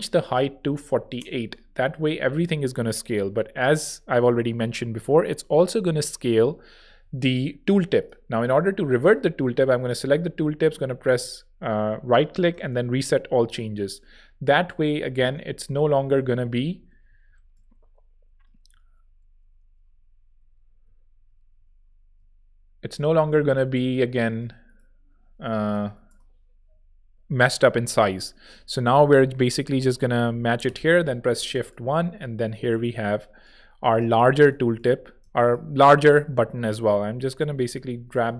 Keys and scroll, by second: 0.4-1.2 typing, 6.8 super+z, 10.6-11.4 typing, 12.4 Page_Up, 13.3 alt+Page_Up, 15.8 alt+shift+Right, 17.5 alt+shift+Right, 17.5 alt+shift+Down, 18.5 alt+shift+Up, 20.3 alt+Down, 21.5 alt+shift+Up, 22.3 shift+Up, 25.3 Right, 25.6 BackSpace, 26.0 Return, 26.6 alt+Return, 27.7 alt+z, 28.4 alt+shift+z, 28.9 alt+shift+Down, 29.4 alt+shift+Up, 31.0 alt+shift+z, 31.7 alt+z, 33.5 space, 34.1 v, 35.1 shift+v.